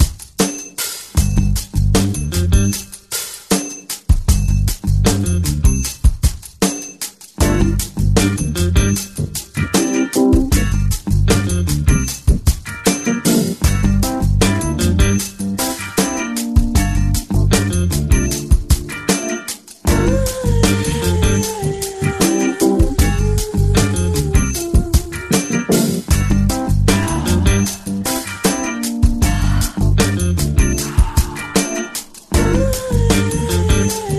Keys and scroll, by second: 0.0 ], 0.3 ], 5.2 [, 22.4 ctrl+=, 24.4 [, 25.4 [, 25.6 [, 33.6 [, 33.7 [, 33.9 [.